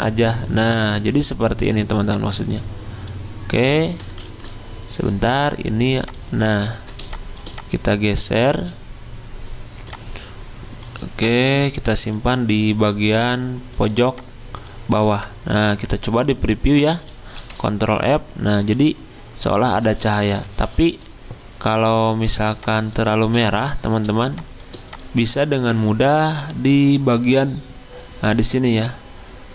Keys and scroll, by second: 4.2 ctrl+z, 17.4 f, 20.3 Escape.